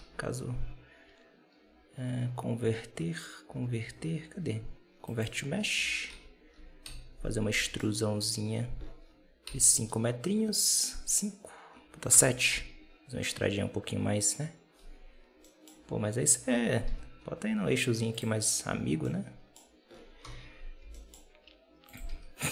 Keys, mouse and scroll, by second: 5.6 Tab, 5.8 scroll down 1, 6.0 a, 6.7 KP_7, 7.4 e, 18.9-20.1 middle drag, 20.1 KP_7, 20.7 g, 22.0 Tab, 22.4 Tab.